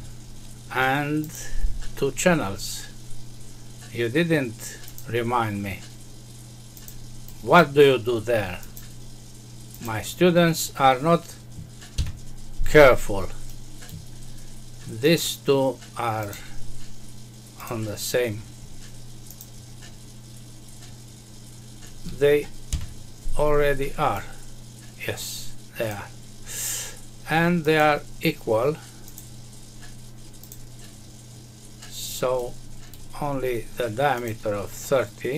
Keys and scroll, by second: 11.9 Escape, 22.6 Escape.